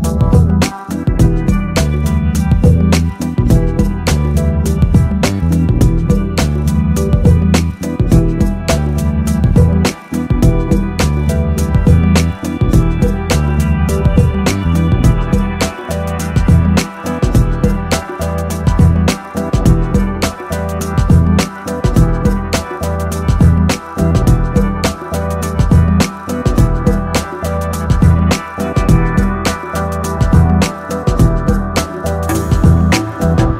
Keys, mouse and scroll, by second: 0.6-2.3 middle drag, 3.3-4.5 drag, 4.5-6.2 middle drag, 6.2-7.6 drag, 9.1 click, 14.0 KP_0, 20.3 KP_0, 28.2 click, 29.5 click, 30.1 click, 30.4 middle click, 31.1 middle click, 32.0 middle click.